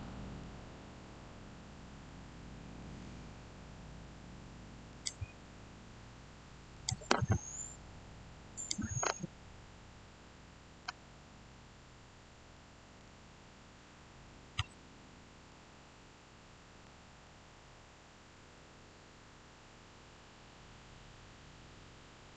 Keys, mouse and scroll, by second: 0.7 scroll down 1, 1.5-1.9 scroll up 1, 1.9-4.8 middle drag, 4.8 click, 14.4 click, 15.2 shift+scroll down 1, 17.1-22.3 shift+middle drag.